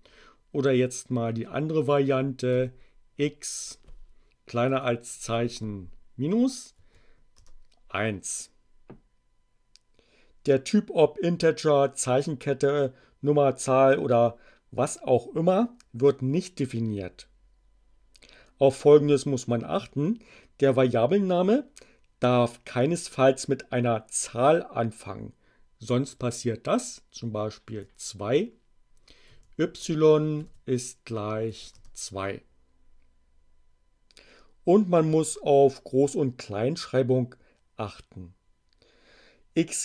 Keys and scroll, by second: 2.5 x, 4.6 <, 5.3 -, 6.7 1, 7.2 Return, 27.6 2, 29.2 y, 30.3 shift+0, 31.5 2, 31.7 Return.